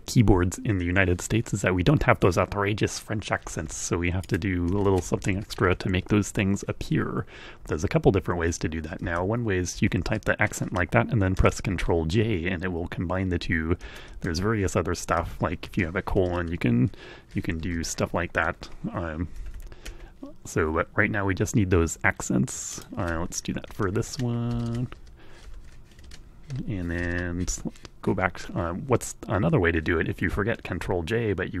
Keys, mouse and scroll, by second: 3.8 click, 4.4 Right, 5.8 ', 6.8 Left, 9.5 Right, 10.7 ctrl+j, 12.2 Left, 14.8 Left, 15.4 shift+;, 16.0 ctrl+j, 16.5 BackSpace, 17.5 e, 19.2 Right, 22.5 click, 22.9 End, 23.1-24.3 typing, 24.4 ctrl+j, 24.6 ctrl+Tab, 25.2 End, 25.4 ', 25.8 ctrl+j, 26.8 shift+Tab, 27.2 Home, 27.7 Right.